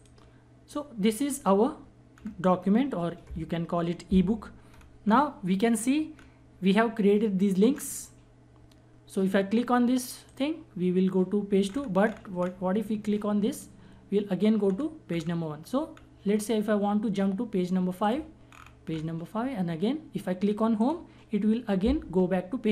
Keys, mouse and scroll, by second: 1.6 scroll down 1, 4.2 scroll up 1, 4.6 scroll down 1, 9.8 click, 11.2 scroll down 1, 13.1 click, 14.2 scroll down 1, 17.6 click, 18.1 scroll down 1, 20.4 click, 22.4 scroll down 1.